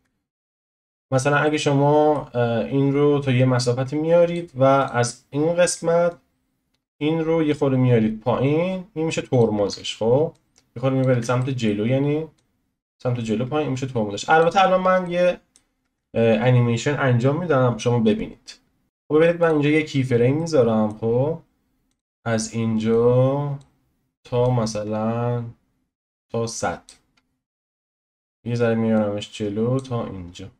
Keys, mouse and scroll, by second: 0.3-0.8 scroll up 1, 0.8-3.2 shift+middle drag, 3.2 click, 4.8 click, 6.1-9.6 drag, 9.6 ctrl+z, 10.3 click, 11.1 ctrl+z, 11.4-12.3 middle drag, 12.3 click, 14.6-15.0 scroll down 1, 15.0-15.9 middle drag, 15.9 ctrl+z, 18.8 ctrl+space, 18.8-19.4 shift+middle drag, 19.4-20.4 drag, 20.4-22.0 middle drag, 22.0 click, 23.0 click, 24.4-29.0 drag, 27.2-27.7 scroll down 4, 27.7-29.0 shift+middle drag, 30.2 scroll up 1.